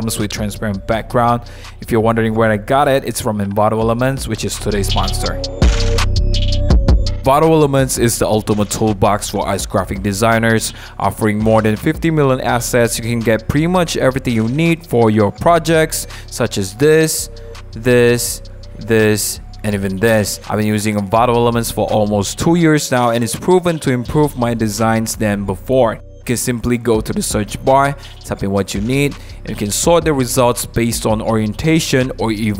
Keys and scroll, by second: 0.1 shift+w, 1.7 super+z.